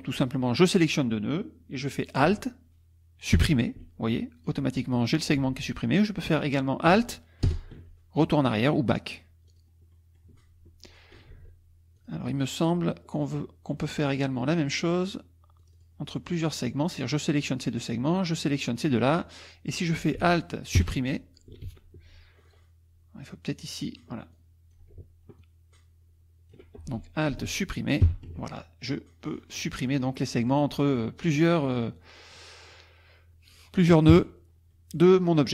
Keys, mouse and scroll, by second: 0.1 click, 3.4 alt+Delete, 4.4 click, 5.4 ctrl+z, 5.8 ctrl+click, 7.5 alt+BackSpace, 9.5 click, 9.9 middle click, 11.3 ctrl+z, 12.0 click, 13.2 click, 13.7 middle click, 14.2 middle click, 15.0 click, 15.6 click, 16.7 click, 18.1 shift+click, 20.8 alt+Delete, 21.6 ctrl+z, 22.5 click, 23.5 click, 24.3 click, 25.4-26.7 shift+drag, 28.0 alt+Delete, 28.8 alt+click, 29.8 click, 31.0-32.2 drag, 32.4 click, 34.1 KP_Subtract, 34.7 click.